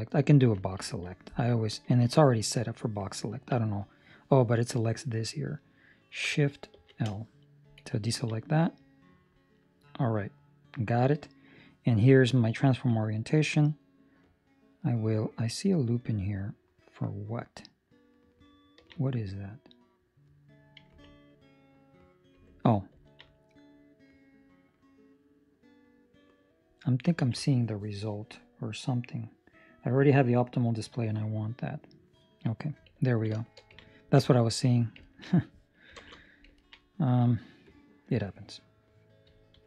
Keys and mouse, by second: 1.8 Escape, 1.8 click, 7.0 shift+l, 7.4 middle click, 8.0 ctrl+middle click, 8.2 middle click, 12.8 click, 16.3 ctrl+middle click, 19.0 middle click, 20.9 Tab, 21.2 right click, 22.3 Tab, 22.9 ctrl+middle click, 23.2 middle click, 24.2 middle click, 27.1 ctrl+space, 28.1 middle click, 29.2 middle click, 30.5 click, 31.2 middle click, 33.0 ctrl+middle click, 33.3 middle click, 33.7 middle click, 33.7 ctrl+middle click, 34.2 shift+middle click, 34.4 shift+middle click, 35.1 ctrl+middle click, 35.9 ctrl+space, 36.5 ctrl+middle click, 36.8 middle click, 37.6 click.